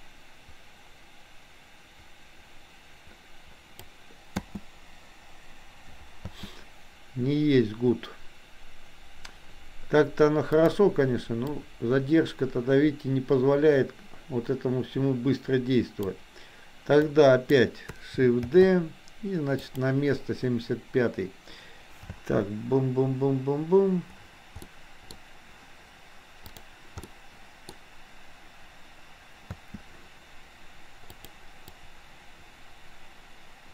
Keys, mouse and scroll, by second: 4.4 space, 10.6 click, 11.5-16.3 drag, 17.0-17.6 drag, 18.6 shift+d, 22.1 space, 24.6 middle click, 27.1 middle click, 29.5 space, 31.1 click, 31.8-33.7 drag.